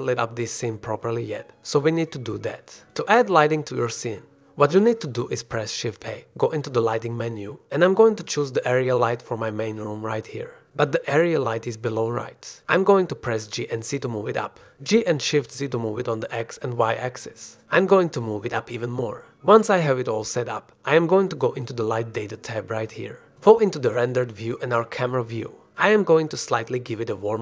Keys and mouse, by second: 0.6-1.4 drag, 1.5-1.8 drag, 2.1-2.5 drag, 3.8 click, 5.2 click, 5.5 shift+a, 14.6 g, 15.1 z, 16.3-17.2 drag, 17.3 s, 18.3-18.9 drag, 19.5 g, 19.9 shift+z, 25.2 click.